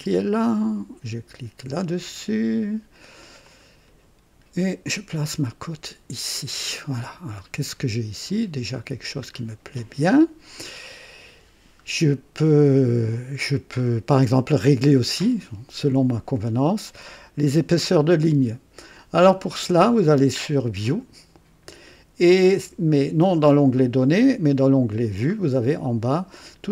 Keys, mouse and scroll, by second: 3.4 click, 4.8-6.6 drag, 7.2 scroll up 1, 8.3 middle click, 8.3 scroll down 1, 13.3-13.7 scroll up 1, 14.5-15.3 middle drag, 20.8 click, 22.9 click, 24.7 click, 25.3-26.1 scroll down 2.